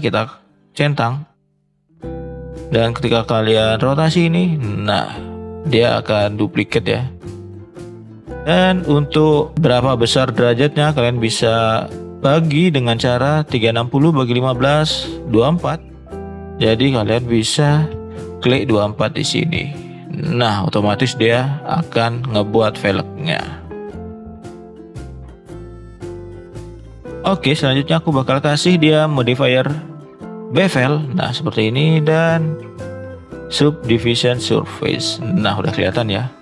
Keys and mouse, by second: 1.2 click, 2.3 click, 3.9 r, 15.3 click, 16.9-20.5 drag, 21.6-22.0 middle drag, 22.3-22.7 middle drag, 22.9 click, 23.3-24.0 middle drag, 24.1-24.5 middle drag, 24.6 middle click, 24.7 middle drag, 26.8 shift+middle click, 27.6-30.6 drag, 31.8 drag, 32.4-34.1 drag, 35.0 middle drag, 35.7 shift+middle click.